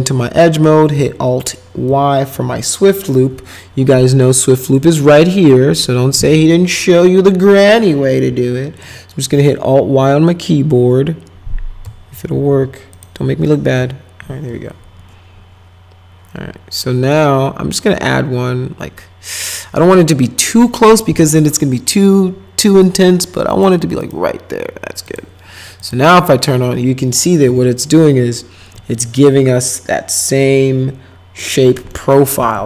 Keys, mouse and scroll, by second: 2.5 alt+y, 9.3 alt+y, 12.3 alt+y, 12.9 click, 13.6 alt+y, 23.5 click, 24.0 right click, 25.0 click, 25.8 click, 26.3 middle click, 27.4 F4, 31.4 middle click, 31.9 middle click, 32.5 middle click.